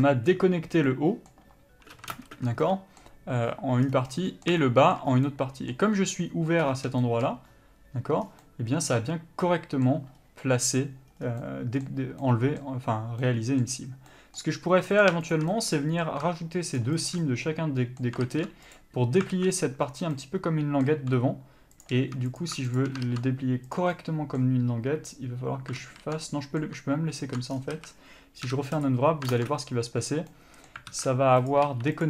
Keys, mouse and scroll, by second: 0.9 scroll up 1, 1.1 middle click, 2.3 ctrl+space, 2.3-15.1 middle drag, 4.0 scroll down 1, 5.3 scroll up 1, 6.8-7.2 scroll up 1, 8.4 scroll down 1, 10.3-11.3 scroll up 1, 11.3 scroll down 1, 13.9-14.2 scroll up 1, 15.1-15.5 drag, 15.7-16.9 middle drag, 16.9 shift+click, 17.4-21.9 middle drag, 18.9 ctrl+e, 19.5 alt+a, 21.3-21.9 scroll up 1, 21.9 click, 22.4-22.9 drag, 23.9 ctrl+e, 24.1-29.5 middle drag, 26.0 ctrl+z, 27.4 ctrl+z, 27.7 scroll down 1, 27.9 a, 29.0 u, 29.5 ctrl+space, 31.1 alt+a, 31.7 click, 31.8 3.